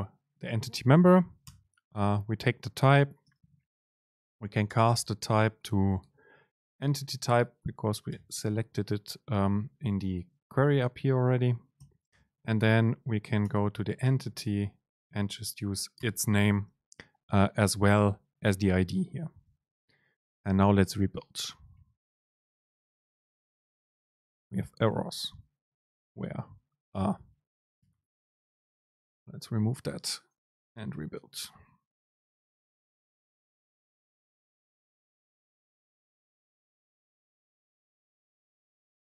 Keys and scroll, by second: 4.8 super+space, 12.2 super+space, 27.9 BackSpace, 31.1 BackSpace.